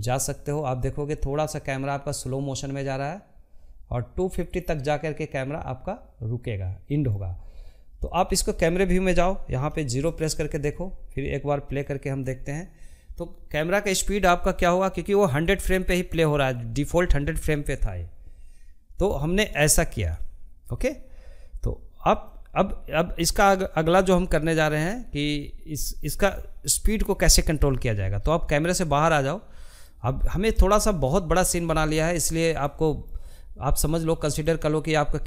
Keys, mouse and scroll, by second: 4.9-7.9 drag, 7.9 KP_0, 9.7-12.7 drag, 20.1-26.2 drag, 26.2-28.0 middle drag, 28.0-28.3 scroll down 2, 28.3-29.5 shift+middle drag, 29.5 scroll down 1, 29.7 shift+middle click, 30.2 scroll up 1, 30.4-32.4 shift+middle drag, 32.4 click, 33.9 s.